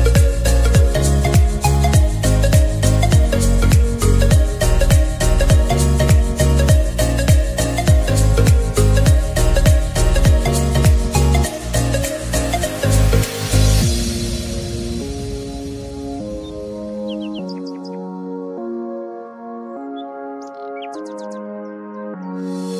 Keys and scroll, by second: 19.9-20.9 typing.